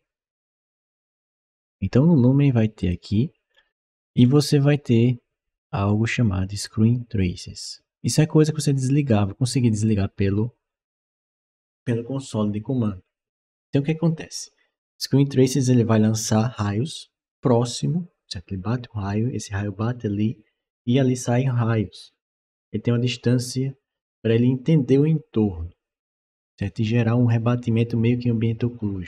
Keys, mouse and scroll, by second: 2.6 click, 3.3 scroll down 1, 4.0-4.3 scroll down 1, 6.3 click.